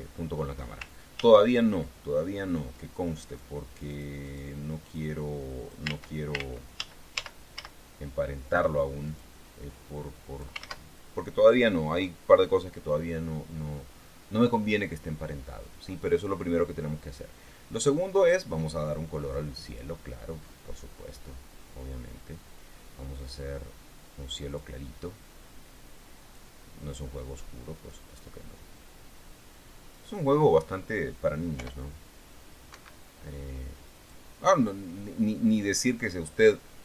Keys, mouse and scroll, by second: 1.5 ctrl+z, 3.6 right click, 4.2 click, 4.6 right click, 5.3 click, 6.2 ctrl+z, 9.4 ctrl+right click, 10.1 click, 11.0 ctrl+z, 18.6 click, 20.0 click, 21.1-25.1 drag, 26.6 click, 27.3-30.5 drag, 31.9 p, 33.0 Escape, 34.3 click, 36.7 click.